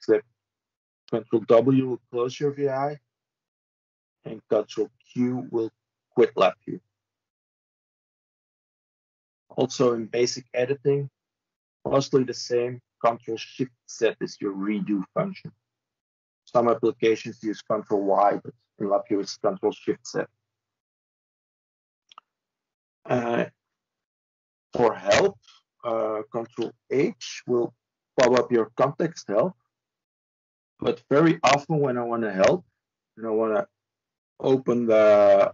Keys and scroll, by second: 26.1 ctrl+h.